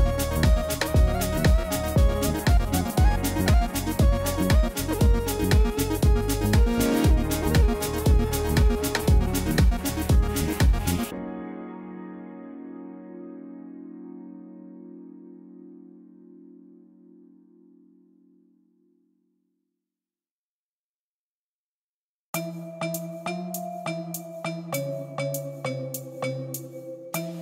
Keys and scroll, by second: 1.3 Tab, 5.6 Tab, 7.0 3, 14.6 1, 14.9 Return, 17.4 Tab, 20.4 Tab, 26.6 g.